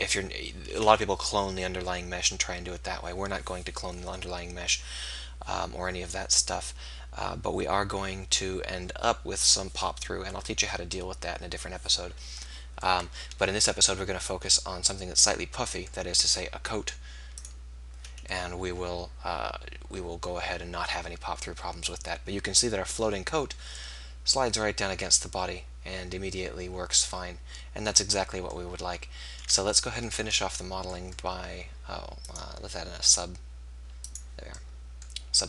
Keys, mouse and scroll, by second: 17.3-19.1 drag, 32.3-34.1 drag.